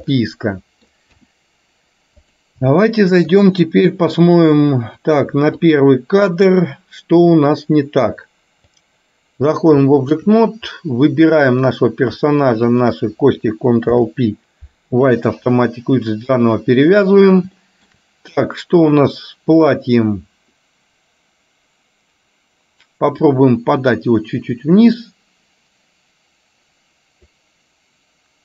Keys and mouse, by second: 0.2 middle click, 1.2 KP_1, 2.4 click, 2.9 middle click, 4.2 click, 5.7 click, 7.5-9.1 drag, 9.9 shift+middle click, 11.6 click, 12.9 shift+click, 13.9 ctrl+p, 17.7 shift+middle click, 18.6 click, 23.9-27.5 drag.